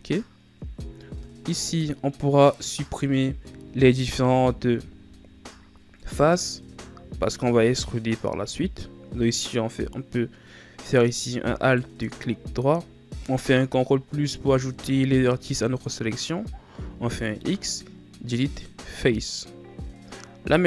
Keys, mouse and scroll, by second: 0.3 scroll up 4, 0.9 Tab, 1.6 middle click, 2.1-3.0 scroll up 1, 3.0 alt+right click, 6.4 KP_Add, 7.2 KP_Add, 10.8 right click, 11.5 alt+right click, 13.6 KP_Add, 14.3 KP_Add, 16.8 x.